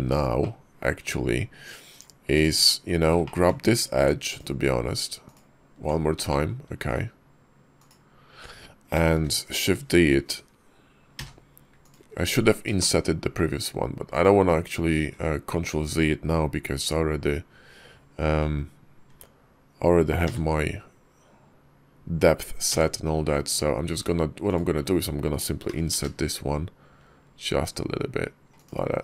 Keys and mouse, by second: 0.2 click, 0.9 Tab, 2.4 Tab, 3.1 shift+click, 4.2 alt+click, 5.1 alt+click, 6.1 shift+click, 9.0 shift+d, 11.0 [, 11.0 p, 12.0 Tab, 12.6 shift+click, 13.9 click, 14.8 `, 18.9 Tab, 20.1 a, 22.5 f, 23.3 Tab, 23.8 Tab, 24.3 click, 25.5 i.